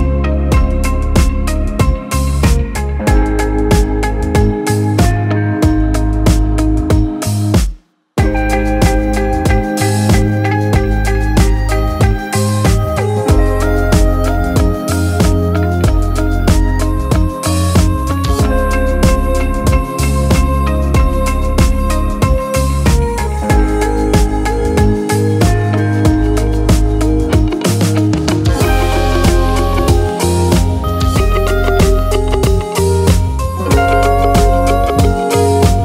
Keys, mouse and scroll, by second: 0.2-1.0 middle drag, 1.0 click, 1.2-2.7 middle drag, 2.7-4.7 scroll up 2, 5.0-6.2 drag, 6.2-7.1 scroll down 2, 7.1 s, 8.1 scroll up 1, 8.7 click, 12.7-13.2 drag, 13.3-15.1 drag, 18.0-20.0 drag, 21.3 click, 23.1-23.4 middle drag, 23.4 click, 23.7 scroll up 2, 24.0 click, 24.5-26.5 drag, 27.9 click, 28.2 scroll down 2, 28.5-30.0 middle drag, 30.0 click, 30.6-31.1 middle drag, 31.1-31.4 scroll up 2, 31.4 middle click, 32.2-34.3 drag, 34.7 scroll down 2, 34.9-35.4 middle drag, 35.4-35.8 drag.